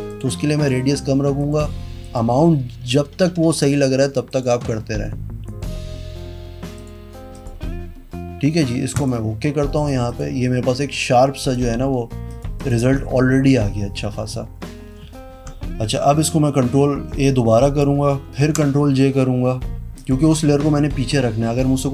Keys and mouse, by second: 0.0 click, 0.5 click, 1.3 click, 2.0 click, 4.2 click, 5.4 click, 6.7 click, 7.3 click, 8.9 click, 9.7 click, 10.0 click, 10.7 click, 11.4 click, 12.5 click, 16.0 ctrl+a, 18.3 ctrl+j, 19.9 click.